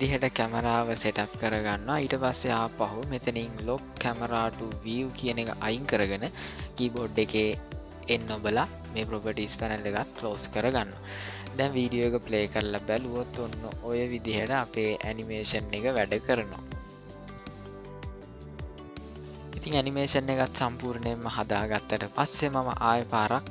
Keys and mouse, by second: 4.1 click, 7.1 n, 10.1-19.2 drag.